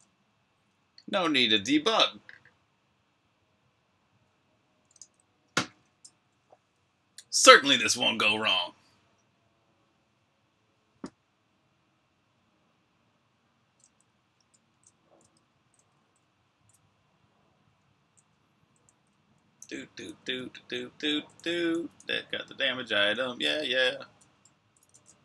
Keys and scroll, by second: 4.8 super+r, 5.1-6.4 typing, 13.7-14.4 typing, 15.7-22.7 typing, 25.0-25.2 typing.